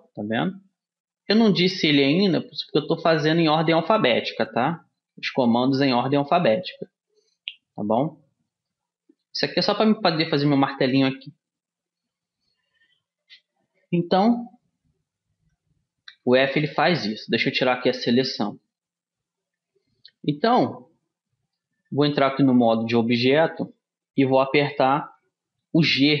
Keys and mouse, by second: 4.7-6.6 middle drag, 7.7-16.3 middle drag, 16.3 a, 17.3-19.9 middle drag, 20.7 Tab, 21.7-23.8 middle drag.